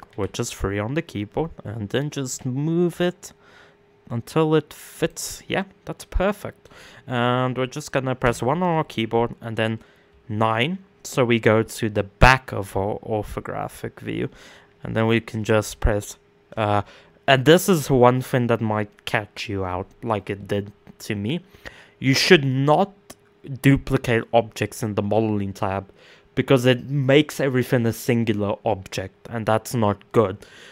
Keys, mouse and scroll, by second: 1.8 g, 4.9 middle click, 5.6-6.0 scroll down 2, 6.0-7.8 middle drag, 7.8 KP_1, 9.6 KP_9, 11.5-12.3 scroll up 1, 12.3-14.5 scroll up 2.